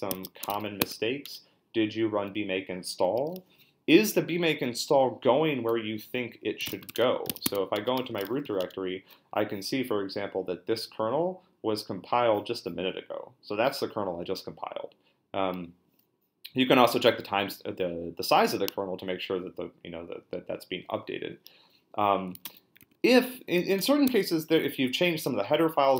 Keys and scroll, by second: 0.0-0.6 typing, 0.8 Tab, 1.2 Return, 6.3-8.9 typing, 22.1-23.8 typing, 24.0 Tab.